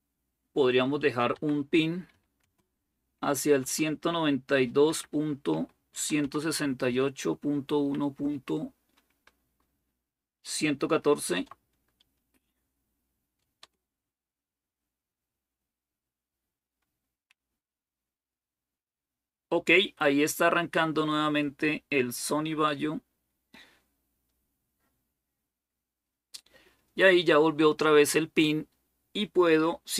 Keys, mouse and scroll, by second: 0.5-8.4 typing, 10.8-11.1 typing, 13.4 Return.